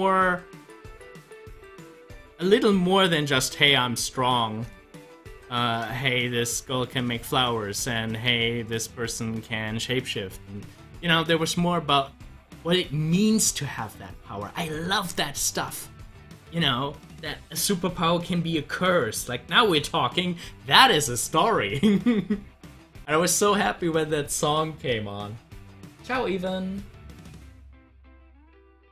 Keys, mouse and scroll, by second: 19.5 click.